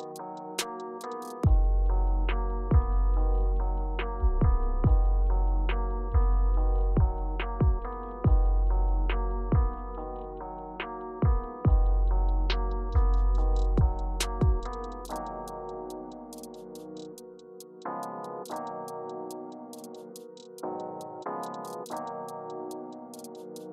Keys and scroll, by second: 11.2-11.6 typing, 13.0-14.0 typing.